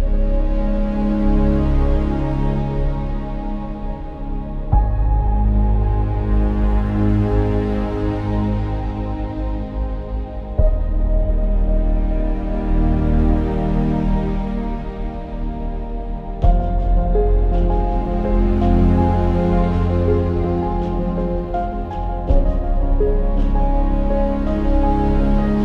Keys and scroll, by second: 10.3 ctrl+i, 14.7 ], 14.8 ], 14.9-15.8 ], 20.8 ctrl+z, 23.0 ctrl+-, 25.1 ctrl+-.